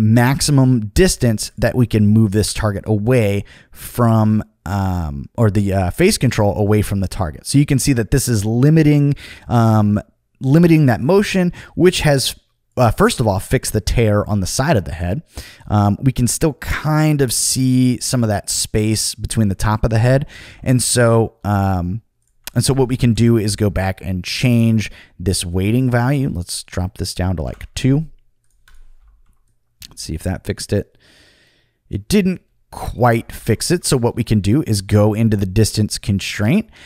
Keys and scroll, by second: 20.5 super+z, 21.4 super+z, 23.1 Return, 27.3 2, 27.4 Return, 33.4 super+z.